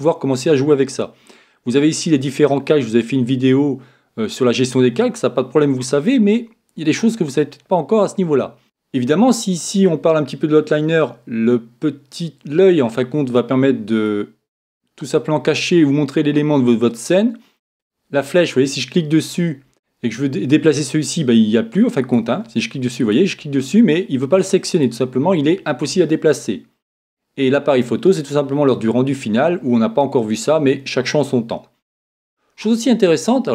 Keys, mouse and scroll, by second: 14.0-16.4 drag, 18.3-20.1 drag, 20.2-21.9 drag, 22.1-26.5 right drag, 27.4-29.2 drag.